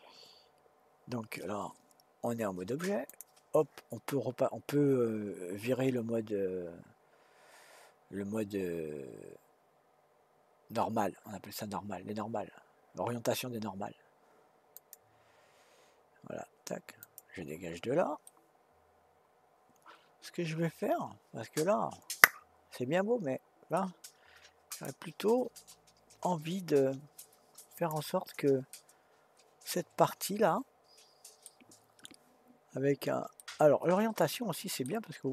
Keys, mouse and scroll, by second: 3.1 click, 14.7-17.9 drag, 18.2-21.3 middle drag, 24.7 click, 27.8 click, 28.7-31.8 middle drag, 33.4-35.3 middle drag.